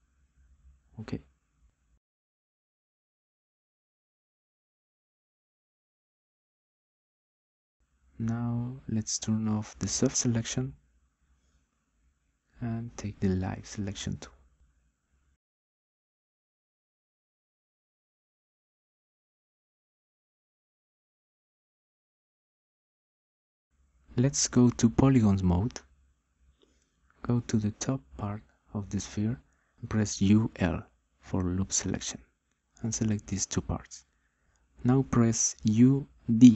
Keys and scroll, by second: 30.4 u, 31.1 l.